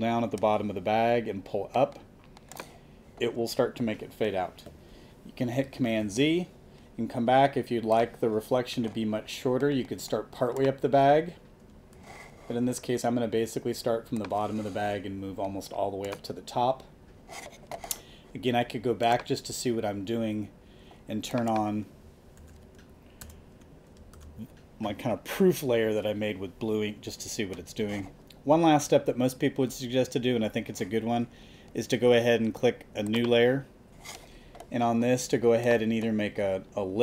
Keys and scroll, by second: 5.9 super+z, 11.9 super+z, 22.4 super+a, 22.9 alt+super+a, 23.2 alt+super+BackSpace, 23.9 alt+super+BackSpace, 24.1 alt+super+d, 24.7 super+d.